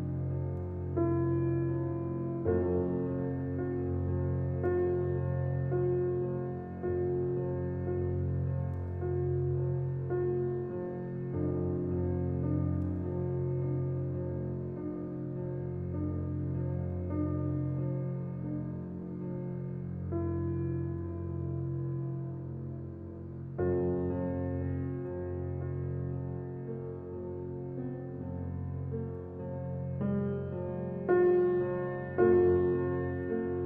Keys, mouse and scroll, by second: 23.5 scroll up 1, 33.2 scroll up 1.